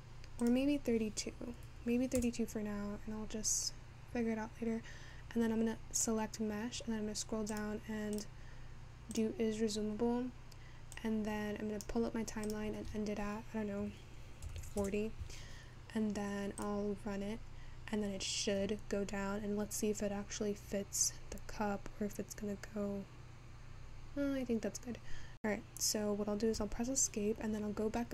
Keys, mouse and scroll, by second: 4.2-7.2 scroll down 10, 7.2-13.8 scroll down 1, 13.8 click.